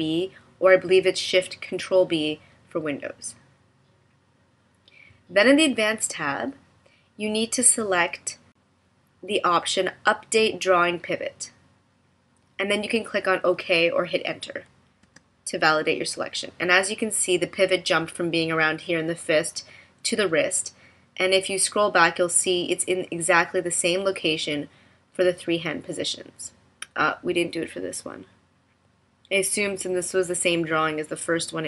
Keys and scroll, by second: 15.1 Return.